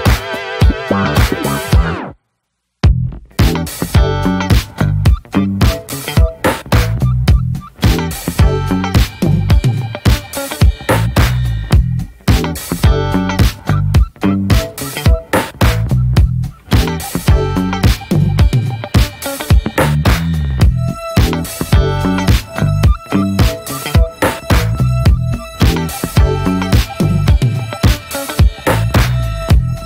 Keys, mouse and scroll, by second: 1.9 scroll down 2, 2.0 middle click, 2.2-3.0 scroll up 1, 3.0-3.8 scroll up 1, 3.8-5.9 drag, 5.9-6.7 scroll up 5, 6.0 middle click, 6.7 scroll down 3, 6.9 middle click, 7.2-14.4 drag, 15.5 scroll down 3, 15.7-20.2 middle drag, 20.2-26.8 drag, 26.8-27.3 scroll down 11, 27.3-29.8 middle drag, 28.2 scroll down 4.